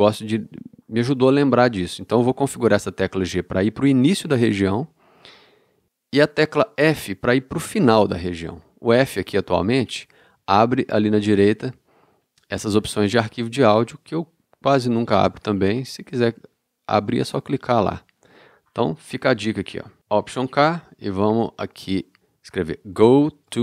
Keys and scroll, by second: 9.5 f, 15.4 f, 20.3 alt+k, 22.1 alt+k, 22.6-23.4 typing.